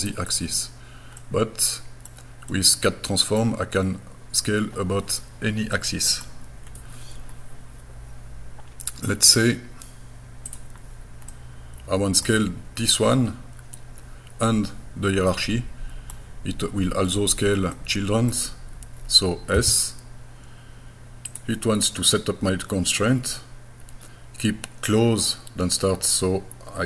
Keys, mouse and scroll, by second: 1.2 middle click, 2.5 middle click, 3.8 scroll down 1, 5.7 middle click, 6.7 scroll down 1, 7.3 scroll up 1, 10.5 click, 11.3 middle click, 15.3 middle click, 17.8 middle click, 19.6 s, 21.3 click.